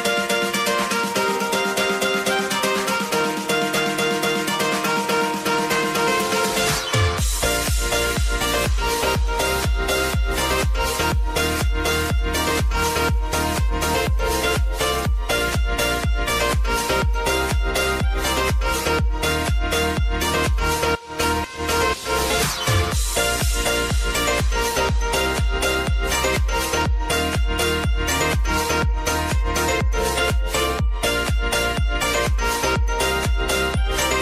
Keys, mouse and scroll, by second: 6.4-10.7 typing, 12.0 click, 13.2 click, 14.0 ctrl+alt+Home, 15.4 click, 25.4 click, 27.7 click, 29.0 ctrl+z, 30.2 click, 33.4 j.